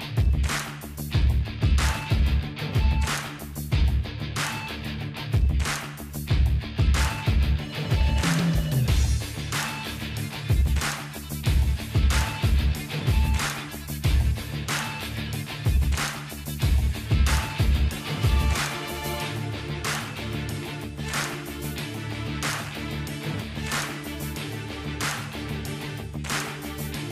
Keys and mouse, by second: 1.5 p, 2.7-5.8 drag, 3.7 alt+h, 4.1-5.2 middle drag, 4.6 ctrl+s, 5.8 middle click, 6.2-8.4 drag, 8.0 h, 8.4 middle click, 8.7-9.7 drag, 9.7 h, 9.9-10.9 drag, 10.5 Tab, 10.5-11.9 middle drag, 11.9-12.9 drag, 12.5 middle click, 13.0-14.0 drag, 15.5 middle click, 16.1-18.9 drag, 19.2 middle click, 19.7-20.7 drag, 21.5 ctrl+z, 22.2-24.1 drag, 23.5 middle click, 23.5 right click, 25.1 ctrl+z, 25.4 click, 25.4 right click, 26.2-27.1 middle drag.